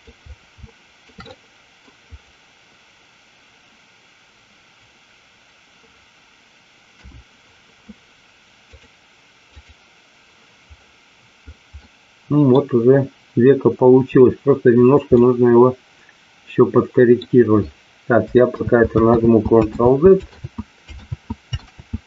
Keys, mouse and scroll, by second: 0.5 shift+middle click, 1.2 middle click, 6.8 KP_1, 8.8-9.8 drag, 11.7 middle click, 15.1-17.1 middle drag, 19.0 ctrl+z, 19.8 ctrl+z, 20.5 ctrl+z, 21.7 ctrl+z.